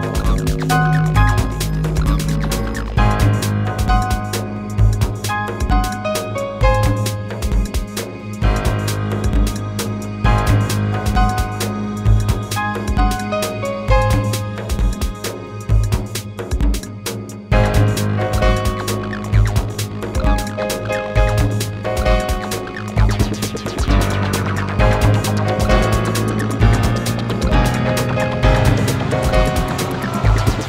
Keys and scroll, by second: 1.6 ctrl+z, 4.2 ctrl+z, 7.4 space, 9.7 space.